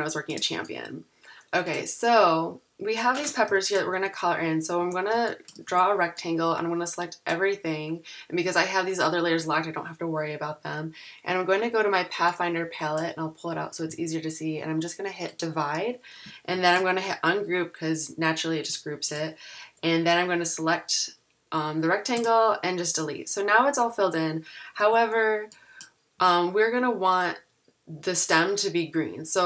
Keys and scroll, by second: 3.5 shift+super+[, 4.2-5.6 typing, 16.5 shift+super+g, 24.8 z, 25.9-26.6 typing.